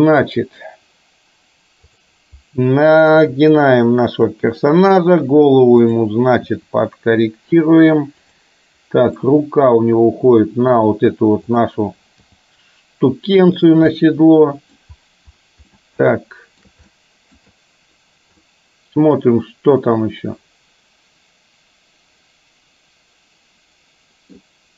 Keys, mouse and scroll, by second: 3.2 r, 7.1 r, 9.2-10.9 middle drag, 11.5 click, 12.4 g, 14.0 middle click, 15.7-16.7 shift+middle drag, 17.0-17.5 shift+middle drag, 18.5-24.4 middle drag.